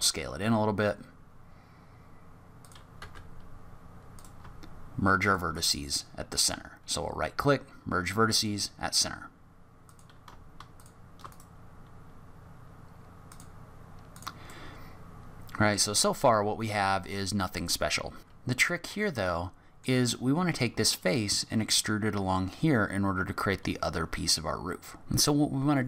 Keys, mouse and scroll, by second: 3.0 1, 4.1 click, 5.2 shift+click, 5.5 shift+right click, 6.4 right click, 9.8 click, 10.7 shift+click, 11.3 right click, 14.1 click, 14.5 middle click, 19.0 middle click, 25.0 ctrl+z.